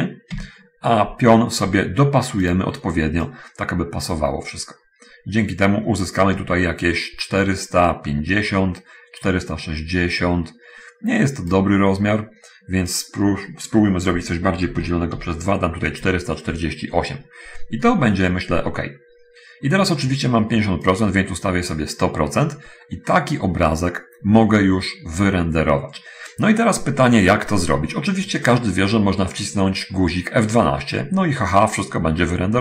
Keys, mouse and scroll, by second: 0.0-0.1 typing, 0.6 Tab, 2.5 click, 3.6-11.7 drag, 13.0 click, 14.8 4, 15.1 4, 15.4 8, 16.2 Return, 21.2-22.0 drag.